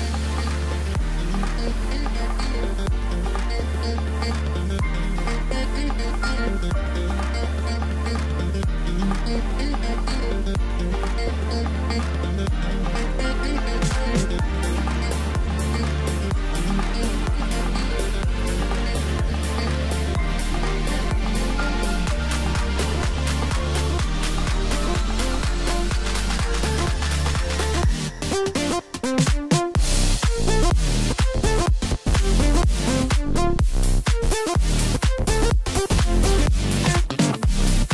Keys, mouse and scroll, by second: 0.2-0.5 scroll down 1, 0.5-3.4 middle drag, 3.4 scroll up 1, 3.6 middle click, 4.2 scroll up 1, 5.2 ctrl+r, 8.5 click, 9.5 click, 10.4-11.5 middle drag, 11.5 g, 14.2 scroll down 1, 14.5 middle click, 15.1-15.8 scroll up 1, 16.2 ctrl+b, 20.1-21.6 drag, 22.0-22.3 scroll down 1, 22.4-25.6 middle drag, 26.1 Tab, 26.6 scroll up 1, 26.9 scroll down 2, 27.2-29.0 middle drag, 29.0 scroll up 1, 29.8 scroll down 2, 30.0-30.9 middle drag, 30.9 scroll up 2, 33.3 click, 35.5-36.8 drag, 37.4-37.8 scroll up 2, 37.8-37.9 middle drag.